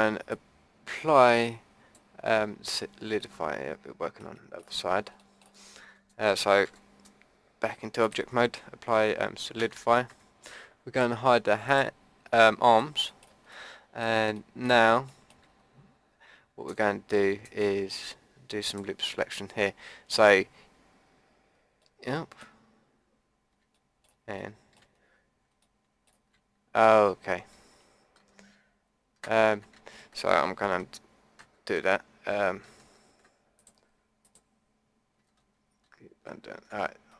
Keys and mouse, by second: 0.3 click, 2.6-3.9 middle drag, 5.7 middle click, 6.7 Tab, 8.0-10.1 drag, 9.6 Tab, 10.1 Tab, 11.6-12.8 drag, 14.4-15.8 middle drag, 16.6 Tab, 17.0-20.1 middle drag, 20.2-21.8 drag, 21.9 middle click, 23.8-25.7 middle drag, 28.2 ctrl+z, 29.5 Tab, 30.8 ctrl+z, 31.4 ctrl+z, 32.0-32.7 drag, 32.9 ctrl+z, 33.6-36.2 drag, 35.3 ctrl+z, 35.8 ctrl+z, 36.2 ctrl+z.